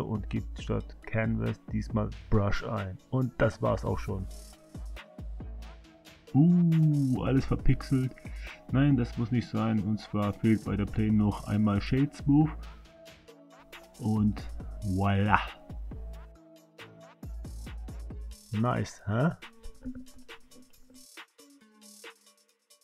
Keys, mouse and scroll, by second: 3.8 space, 9.0 space, 10.0 click, 10.8 click, 11.5 right click, 14.4 space, 22.3 space.